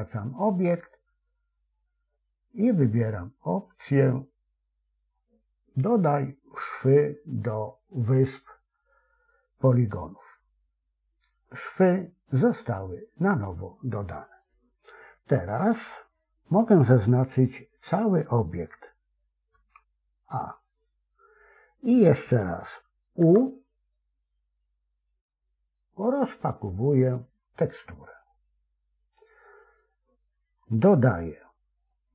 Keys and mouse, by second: 1.6-10.5 drag, 19.4 a, 23.1 u, 31.8-32.1 drag.